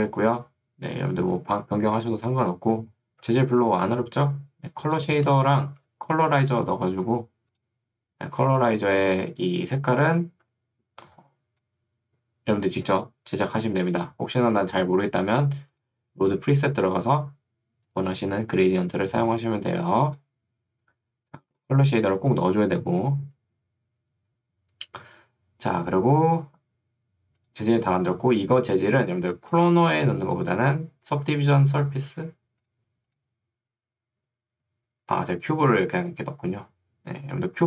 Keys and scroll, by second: 1.3 Escape, 3.3 ctrl+2, 5.3 Escape, 5.9 ctrl+2, 7.1 Escape, 8.7 ctrl+2, 13.5 Escape, 21.5 ctrl+2, 23.9 Escape, 29.2 ctrl+2, 32.1 Escape.